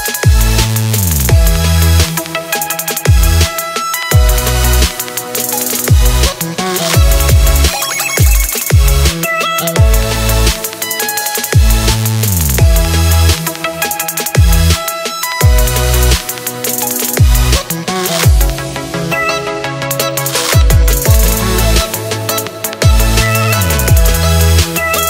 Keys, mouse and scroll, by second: 0.0-1.0 drag, 1.9 click, 2.5 drag, 2.8 scroll down 7, 3.9-5.5 drag, 6.3-8.0 drag, 10.1-11.5 drag, 12.5-13.9 drag, 15.4-19.1 drag, 20.3 click, 24.1 click.